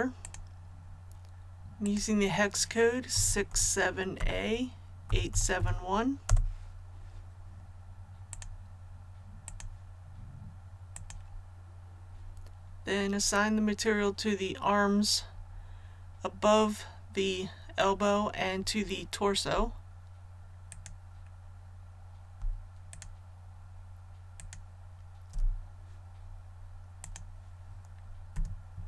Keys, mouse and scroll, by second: 0.2 click, 3.1 KP_6, 3.5 KP_7, 5.1 KP_8, 5.3 KP_7, 5.6 KP_1, 8.3 click, 20.7 alt+right click, 22.9 alt+shift+right click, 27.0-28.1 drag, 28.3 a.